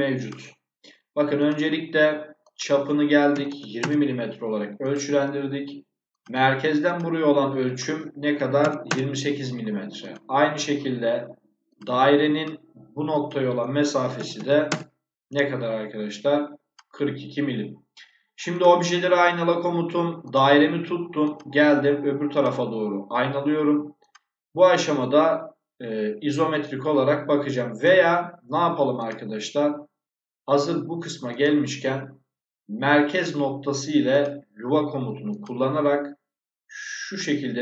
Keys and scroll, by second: 3.2 2, 3.7 Return, 8.2 2, 8.8 Return, 14.0 4, 14.2 2, 14.6 Return.